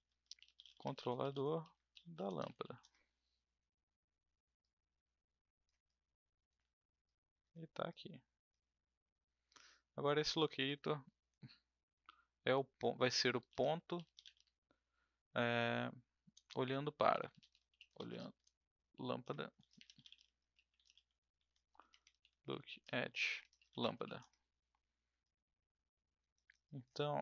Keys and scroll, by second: 0.0-3.1 typing, 13.2-14.8 typing, 16.3-24.4 typing.